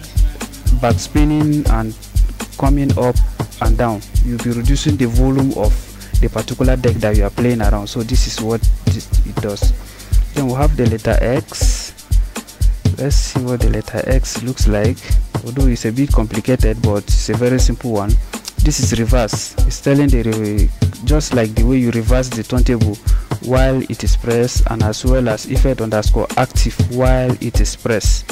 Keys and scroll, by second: 13.6 x.